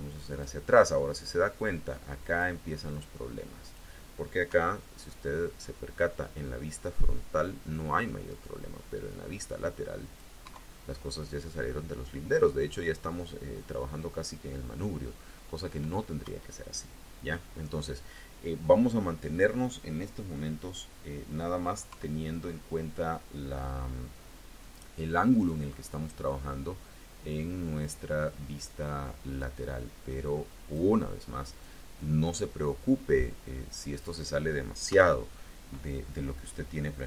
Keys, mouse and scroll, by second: 1.4-2.4 drag, 2.7-3.8 drag, 4.3 KP_1, 8.1 click, 8.9-10.2 drag, 10.3 KP_3, 16.1 KP_1, 17.1-17.7 scroll up 1, 21.7 KP_3, 25.2 click, 26.1-27.9 drag, 28.4 click, 29.2-30.8 drag, 31.3 click, 32.2-34.0 drag, 34.7 KP_1, 35.5-36.1 scroll up 1, 36.5 scroll up 1.